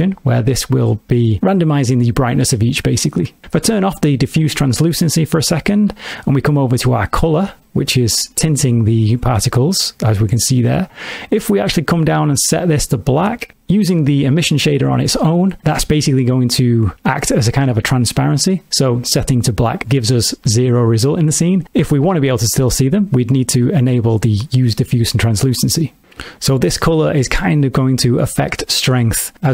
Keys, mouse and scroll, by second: 0.0 click, 4.7 click, 7.2 click, 23.4 click, 26.9 click.